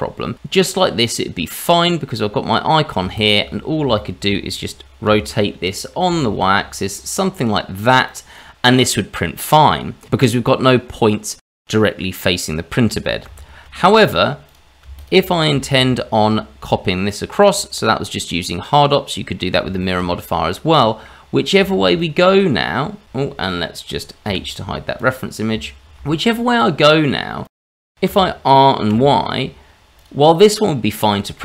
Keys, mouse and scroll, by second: 0.5 click, 1.8 middle click, 3.1 shift+click, 3.6-3.9 scroll down 2, 3.9 shift+middle click, 5.0 r, 8.3 middle click, 10.3-11.4 scroll up 2, 11.4 scroll up 1, 13.3 ctrl+z, 13.7-14.1 scroll down 2, 14.4 click, 14.9 shift+click, 15.6 alt+x, 17.4 click, 18.0 middle click, 19.7 shift+middle click, 20.1-20.5 scroll up 2, 20.5 middle click, 21.3 scroll down 2, 21.7 shift+z, 22.1 middle click, 23.0 Delete, 23.0 ctrl+z, 23.0 click, 24.3 h, 25.0 click, 26.0 shift+z, 26.3 shift+middle click, 26.8 click, 27.2 middle click, 28.1 r, 31.1 middle click.